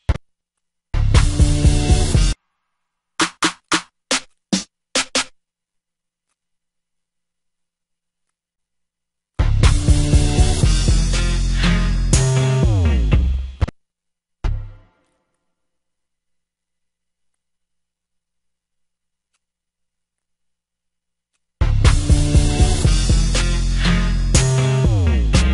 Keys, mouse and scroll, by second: 19.2 click, 22.7 F1, 22.8 F5, 24.6-25.2 drag.